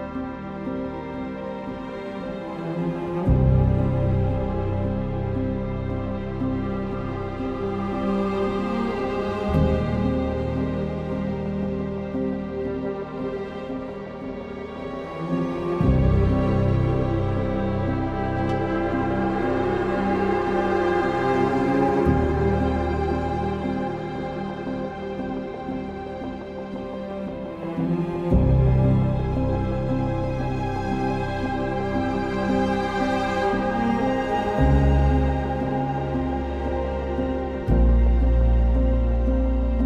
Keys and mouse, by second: 0.6 s, 1.7 click, 3.0 alt+e, 4.5 i, 5.6 g, 5.9 x, 6.9 click, 8.7 i, 9.5 click, 10.5 i, 11.6 g, 11.9 x, 12.9 click, 13.1 2, 13.5 alt+click, 14.0 alt+shift+click, 14.9 ctrl+b, 15.6 click, 17.1 ctrl+b, 19.3 Tab, 20.3 Tab, 21.1 Tab, 21.5 Tab, 22.4 ctrl+r, 24.2 Escape, 24.9 3, 25.2 alt+click, 27.4 3, 28.1 alt+click, 28.7 ctrl+KP_Add, 30.9 alt+shift+click, 31.9 i, 35.2 alt+e, 37.7 click, 38.0 2, 39.2 2, 39.5 alt+click.